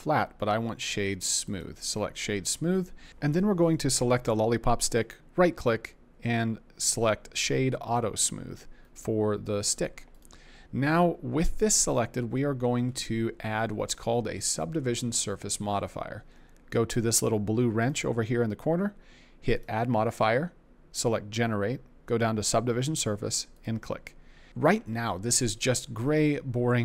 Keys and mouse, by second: 5.0-7.9 right drag, 8.8 middle click, 17.8 click, 19.7-23.7 drag.